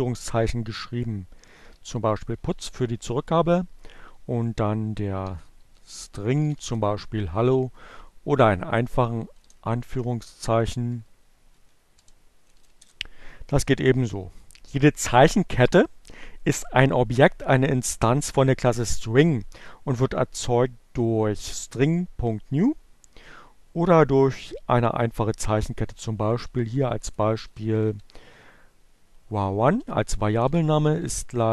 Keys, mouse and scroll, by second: 0.0-0.3 typing, 1.9 s, 2.0 space, 2.3 shift+2, 4.4-6.4 typing, 7.2 shift+Left, 8.6 Delete, 9.6 shift+Right, 10.2 Left, 10.4 Right, 10.5 BackSpace, 12.3 shift+Return, 24.7-25.9 typing, 27.3-28.1 typing, 30.0-31.5 typing.